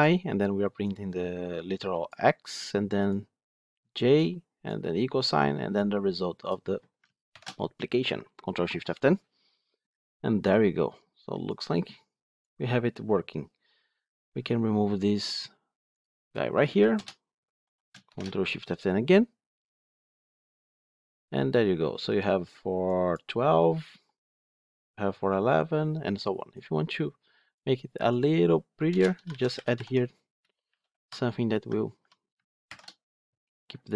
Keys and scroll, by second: 7.2 ctrl+shift+F10, 18.7 ctrl+shift+F10, 29.7 Tab, 32.5 ctrl+shift+F10.